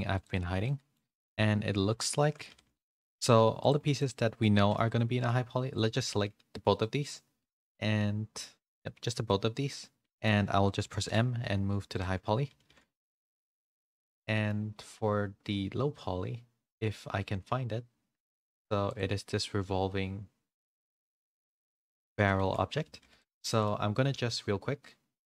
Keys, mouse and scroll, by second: 0.6 middle click, 1.2 click, 1.8 h, 2.1 shift+middle click, 2.5 a, 2.7 middle click, 3.6 click, 4.5 middle click, 4.8 g, 7.6-9.0 middle drag, 9.2 middle click, 12.5 m, 12.5 a, 13.0 shift+middle click, 13.0 a, 13.3 middle click, 14.0 shift+middle click, 14.3 middle click, 22.3 shift+middle click, 22.3 shift+a, 23.5 shift+middle click.